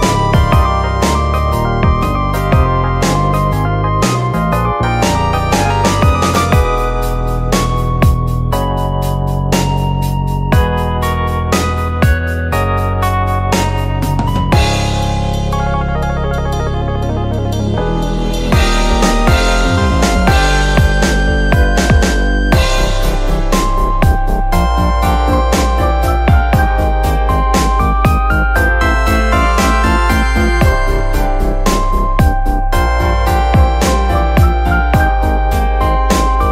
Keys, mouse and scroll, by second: 0.7-1.2 scroll down 2, 1.2 g, 2.8-3.2 scroll down 2, 3.2 shift+middle click, 3.8 Tab, 4.1 middle click, 4.6 4, 11.9 middle click, 12.7 click, 14.3 x, 16.1 Tab, 16.9 s, 18.2-21.8 drag, 21.8 middle click, 22.2 Tab, 23.4 click, 24.0 click, 26.1 click, 26.8 scroll down 4, 27.7-28.1 drag, 28.1-29.6 scroll down 5, 28.6 drag, 29.6 click, 32.4-33.2 middle drag, 33.2 Tab, 34.7 alt+s, 36.3 middle click.